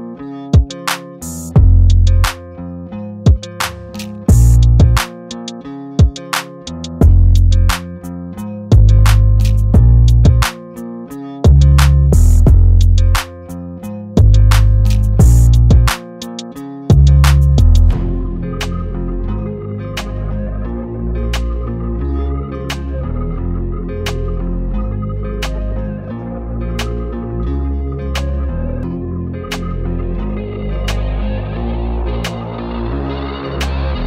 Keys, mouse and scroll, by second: 0.9-1.4 scroll up 1, 1.5 shift+right click, 1.9 shift+a, 3.6 s, 4.2 s, 5.1 g, 7.0 g, 7.8 scroll up 1, 8.0 Tab, 8.3 ctrl+r, 10.1 ctrl+r, 10.6 2, 10.9 click, 11.2 shift+drag, 11.4 shift+drag, 11.7 shift+drag, 12.0 shift+drag, 12.1 shift+drag, 12.3 shift+drag, 12.6 g, 14.6 click, 15.0 ctrl+click, 15.3 g, 15.9 ctrl+b, 18.0 click, 18.3 shift+click, 18.8 ctrl+click, 19.2 g, 19.9 o, 20.1 g, 21.8 KP_3, 22.2 scroll down 2, 22.3 shift+middle click, 22.5 scroll up 1, 22.9 g, 24.0 middle click, 24.3 click, 24.6 ctrl+click, 24.8 middle click, 25.1 KP_3, 25.5 g, 28.0 middle click, 28.5 Tab, 28.7 middle click, 29.0 KP_0, 29.9 s, 31.1 s, 32.0 g.